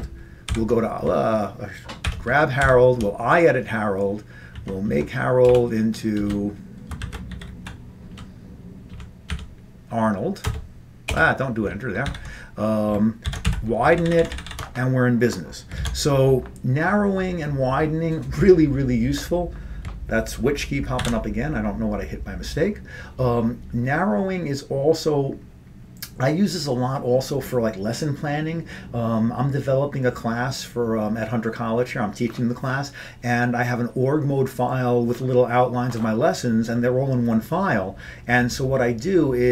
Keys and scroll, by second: 0.6 ctrl+;, 2.1 ctrl+=, 2.7 ctrl+;, 4.6 Left, 5.0 Right, 5.6-8.2 typing, 9.0 Delete, 9.4 Delete, 10.5 Return, 11.2 BackSpace, 12.2 ctrl+g, 13.4 ctrl+x, 13.6-14.9 typing, 14.0 ctrl+p, 15.9 ctrl+x, 21.1 ctrl+g.